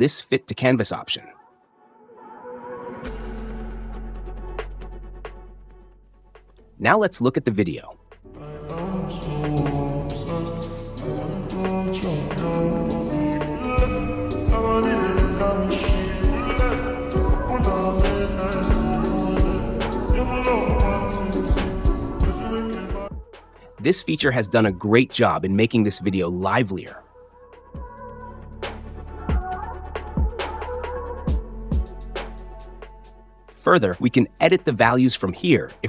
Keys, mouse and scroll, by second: 2.0-4.7 drag, 5.3-6.3 drag, 6.9 click, 8.0 space, 26.5-27.5 drag, 28.5 click.